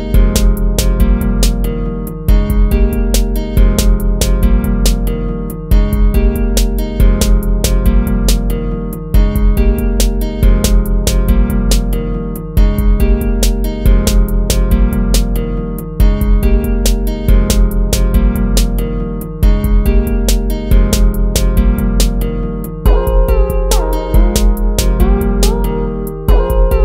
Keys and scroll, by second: 0.2 ctrl+-, 0.3 ctrl++, 1.4 ctrl+-, 1.5 ctrl++, 2.3 ctrl+-, 2.4 ctrl++, 2.9 ctrl+-, 3.2 ctrl++, 3.6 ctrl+-, 3.7 ctrl++, 4.6 ctrl++, 4.7 ctrl++, 5.2 ctrl+-, 5.2 ctrl++, 5.6 ctrl++, 6.1 ctrl+-, 8.5 ctrl+z, 8.6 ctrl++, 11.8 ctrl+-, 11.9 ctrl++, 14.2 ctrl+-, 14.3 ctrl++, 15.5 ctrl+-, 15.6 ctrl+z, 15.8 ctrl+-, 17.2 ctrl+-, 17.5 ctrl+-, 18.1 ctrl+-, 21.4 ctrl++.